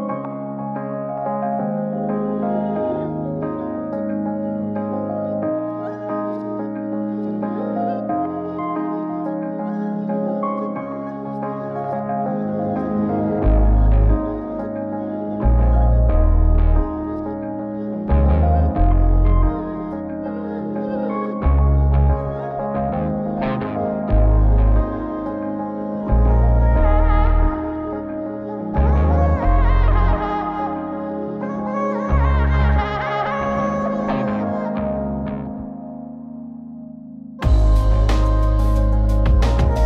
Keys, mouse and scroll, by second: 0.7-1.6 middle drag, 4.4 click, 6.8 click, 7.4 click, 7.8 g, 9.6-10.6 middle drag, 11.9 click, 13.3 shift+d, 14.9 KP_Divide, 18.8 click, 19.7-22.2 drag, 23.2-24.5 drag, 25.0 click, 26.2-28.7 drag, 31.0 click, 33.0 click, 36.9 g.